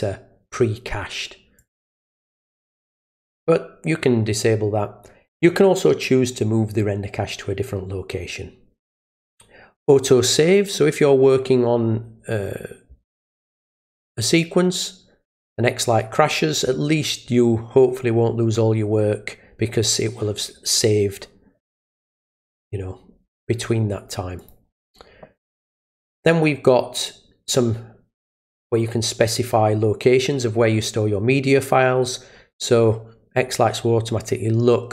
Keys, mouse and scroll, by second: 1.6 click, 2.3 click, 19.7 click, 24.4 click.